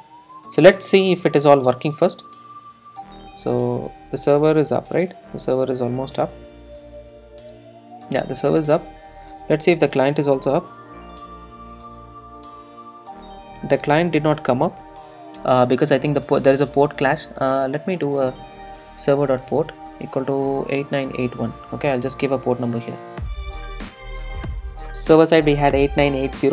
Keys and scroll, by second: 22.0 super+s, 23.1 super+r.